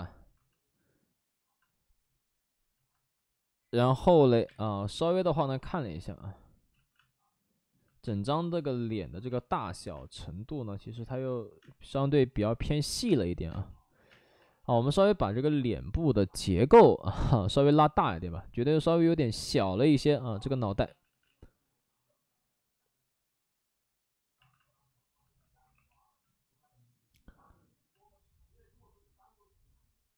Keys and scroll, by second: 0.1 alt+s, 1.4 alt+s, 4.4 space, 5.0 space, 6.6 ctrl+z, 6.9 space, 8.0 space, 9.2 space, 9.9 space, 10.8 ctrl+z, 11.0 ctrl+z, 11.5 space, 12.2 alt+s, 13.4 space, 14.0 space, 15.9 ctrl+z, 20.8 ctrl+z, 21.0 ctrl+z, 21.2 ctrl+z, 24.3 alt+s, 25.7 w, 26.7 w.